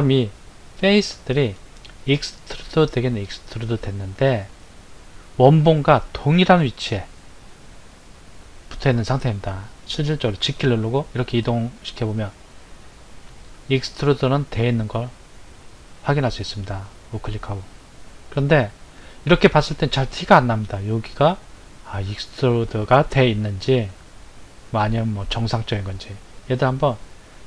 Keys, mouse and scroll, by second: 3.9-4.4 scroll up 4, 4.9 scroll up 2, 10.4 g, 18.3 click, 19.6-21.0 scroll up 3, 27.3 Tab.